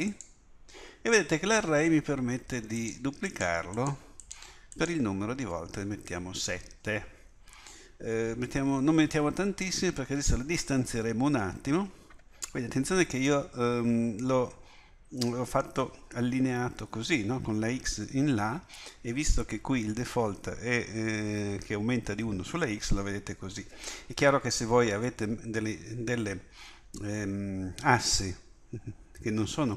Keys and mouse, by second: 2.8-6.8 drag.